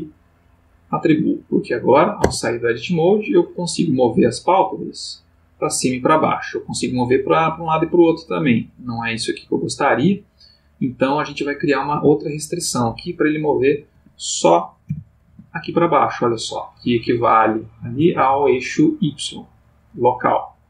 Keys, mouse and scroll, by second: 0.0 click, 2.2 Tab, 3.3 click, 4.1 g, 10.9 Escape, 11.9 g, 13.9 Escape, 14.8 g, 15.3 z.